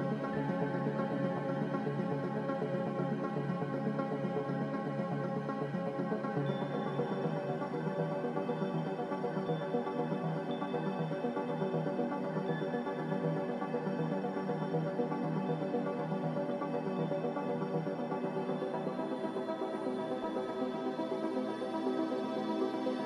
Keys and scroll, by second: 1.2 typing, 3.1 a, 6.4 ctrl+g, 13.8 n.